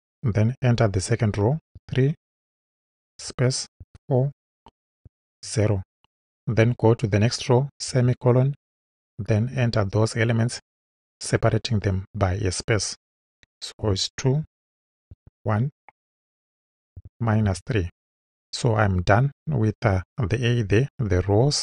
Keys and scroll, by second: 1.7 3, 3.1 space, 3.8 4, 4.3 space, 5.0 0, 7.9 ;, 13.8 2, 14.4 space, 15.1 1, 17.5 3.